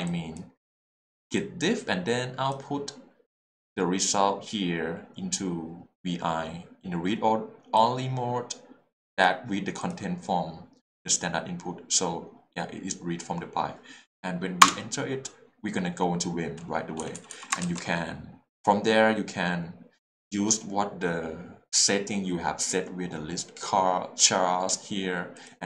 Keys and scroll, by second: 14.6 Return, 17.0 Return, 17.0 j.